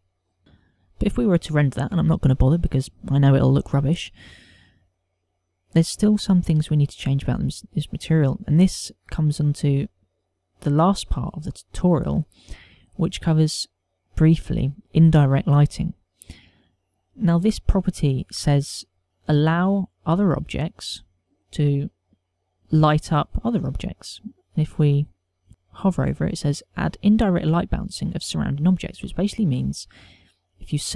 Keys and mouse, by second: 0.9 click, 10.6 click, 12.5 click, 16.4 click, 18.6 click.